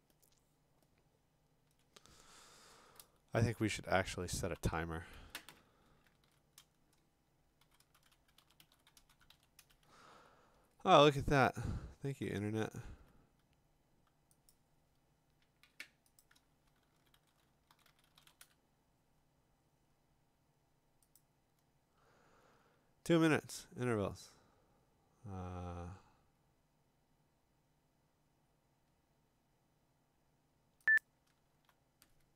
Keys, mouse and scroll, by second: 0.0 click, 0.1 click, 0.6 click, 0.8 click, 0.9-1.7 click, 1.0 click, 1.1 click, 1.1 click, 1.8 click, 1.8-4.7 click, 3.5 alt+Tab, 4.2 alt+Tab, 6.3 ctrl+t, 7.4-9.8 typing, 12.1-12.8 typing, 13.0 alt+Tab, 14.5 click, 16.2 click, 16.3-18.8 typing, 19.9 scroll, 21.2 click, 22.5 scroll, 31.0 click, 31.6 alt+Tab.